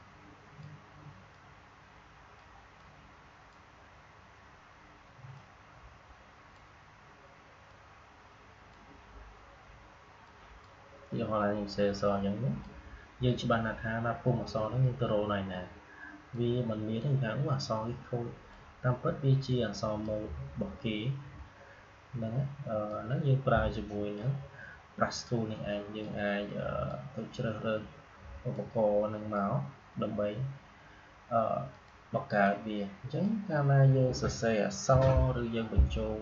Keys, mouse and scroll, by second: 16.2-22.8 drag, 22.8-31.6 drag, 31.6-34.8 drag, 34.8 Delete.